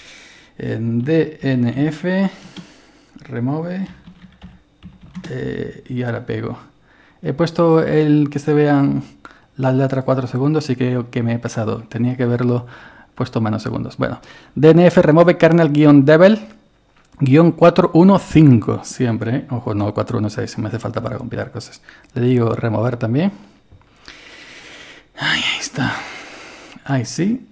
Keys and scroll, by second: 0.9-2.3 typing, 3.6-5.5 typing, 22.5 Return.